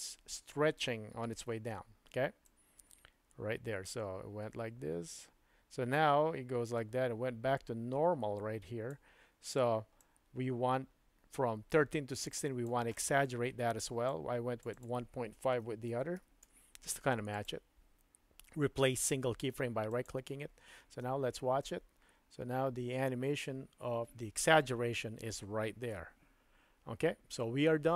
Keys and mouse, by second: 1.7 space, 2.5-9.4 drag, 10.0-12.8 drag, 14.1 click, 14.7-20.1 drag, 17.4-20.1 right drag, 20.9 space.